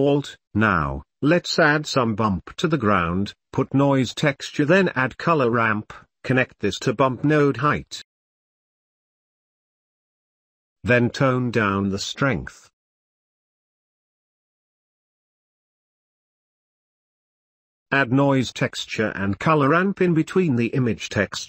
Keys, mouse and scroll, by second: 0.2 ctrl+s, 0.3 Delete, 0.3 click, 1.7 shift+a, 6.1-6.6 drag, 7.1 click, 8.6 click, 8.8-10.2 drag, 10.5 click, 10.8 click, 11.7 click, 13.5 click, 14.4 click, 15.0 click, 15.8 click, 16.3 ctrl+s, 16.8 click, 17.2 ctrl+s, 17.4 click, 18.5-19.1 drag, 19.3 click, 19.7 shift+a, 21.1 g.